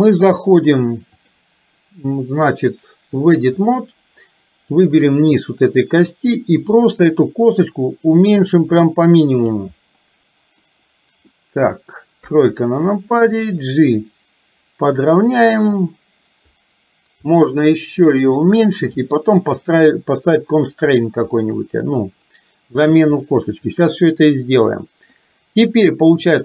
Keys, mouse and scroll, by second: 1.3-3.8 drag, 4.8 click, 6.2-9.5 drag, 10.7 middle click, 12.3 KP_3, 13.4-16.5 drag, 17.4-19.0 drag, 21.4 middle click, 23.3-25.2 middle drag, 26.2-26.4 drag.